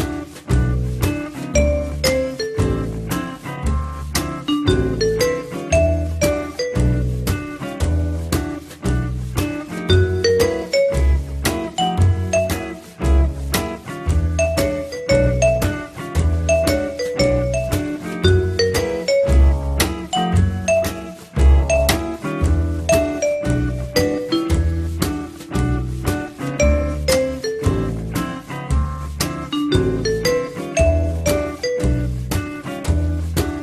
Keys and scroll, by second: 10.5 F8, 26.3 F3, 29.9 F3.